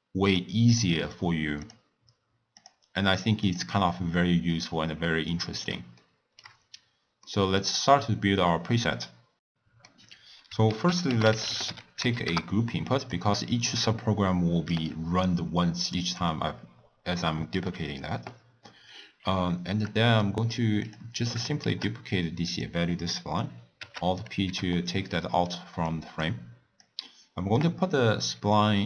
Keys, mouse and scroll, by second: 0.3 drag, 0.6 click, 1.1 drag, 1.6 drag, 2.6 click, 3.4 click, 4.7-5.1 scroll down 1, 5.4-6.7 middle drag, 6.7 scroll up 3, 7.2-10.6 middle drag, 10.6 ctrl+a, 16.1-19.1 drag, 20.2 middle click, 20.8 click, 21.7 shift+d, 23.8 alt+p, 24.4 g, 25.2 middle click, 25.8 click, 26.8 drag.